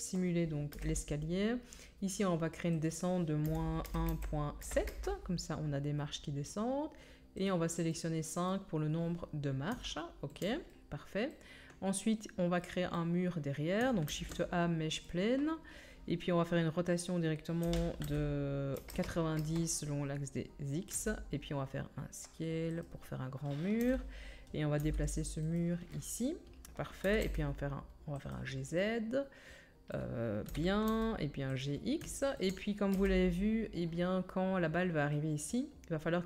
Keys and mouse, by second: 0.7 KP_1, 10.8-14.4 middle drag, 14.0 shift+a, 17.6 r, 20.9 s, 22.5 middle click, 22.8-33.9 drag, 23.8 KP_3, 24.7 g, 27.0 g, 30.4 g, 32.9 KP_1.